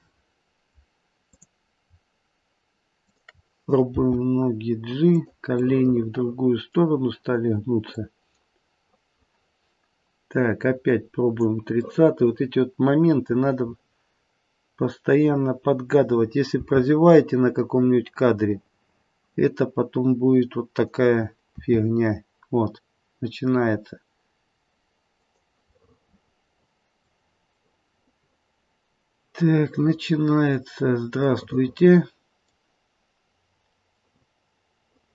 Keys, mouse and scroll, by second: 1.2 click, 2.9 shift+click, 3.9 g, 5.6 middle click, 6.4 middle click, 8.0 click, 11.8 middle click, 12.7 middle click, 13.9-15.2 scroll up 1, 16.6 g, 21.5 r, 25.8 middle click, 27.8 middle click, 28.0 middle click, 29.3 middle click, 29.8 middle click, 31.3 middle click, 34.0 middle click.